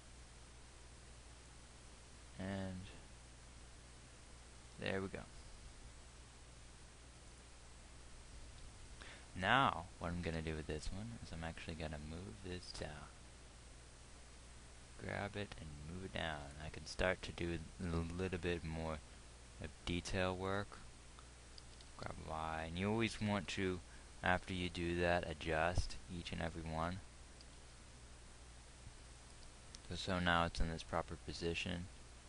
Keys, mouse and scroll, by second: 10.9 g, 18.3 g, 22.2 g, 27.8 g.